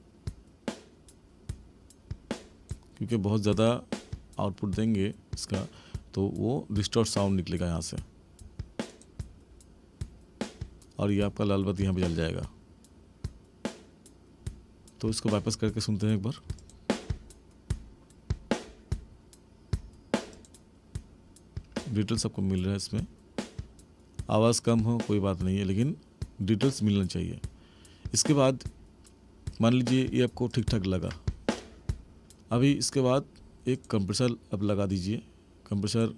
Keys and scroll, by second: 32.5 space.